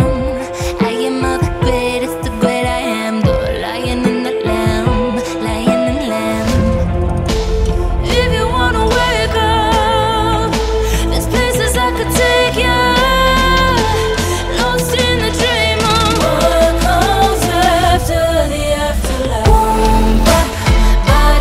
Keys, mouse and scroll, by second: 0.9-1.3 alt+drag, 1.3 alt+middle drag, 1.4-1.8 alt+right drag, 1.8 alt+click, 2.0 alt+right click, 2.6 n, 3.5-4.0 drag, 4.0 n, 4.2 alt+right drag, 4.4 alt+middle drag, 4.5 click, 4.6 alt+right click, 5.5-5.9 drag, 8.8-11.1 drag, 11.4-12.4 alt+drag, 12.9 right click, 13.0 click, 13.3 right click, 13.9-14.3 alt+drag, 14.3 alt+right drag, 14.4 alt+click, 14.8 alt+middle click, 14.9 alt+right drag, 15.0-15.7 alt+drag, 15.7 alt+right click, 16.2-16.5 alt+drag, 16.5 alt+right click, 16.8 alt+click, 16.9 alt+right click, 17.0 alt+click, 17.1 alt+right drag, 17.2 alt+drag, 17.4 alt+right drag, 17.5 alt+click, 20.2 alt+right drag, 20.3 alt+click, 20.4 Tab.